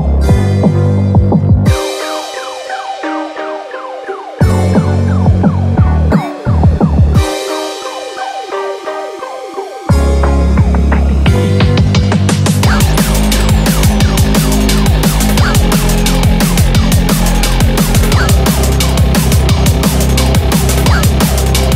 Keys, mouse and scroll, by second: 4.9 scroll up 4, 5.4 shift+middle click, 6.1 shift+middle click, 6.1 click, 6.1 scroll up 1, 7.1 s.